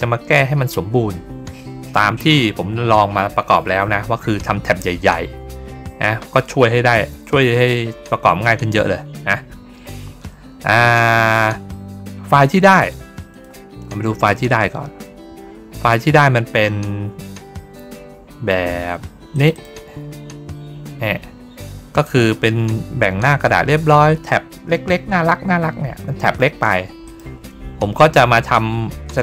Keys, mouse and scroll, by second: 13.2 click, 19.2 click, 19.4 click, 21.0 middle click, 21.9-24.8 drag, 26.9 click.